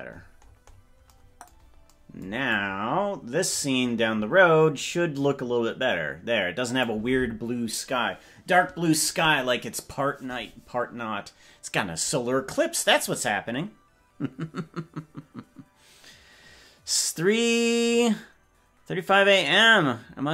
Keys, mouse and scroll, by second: 2.6-7.0 drag.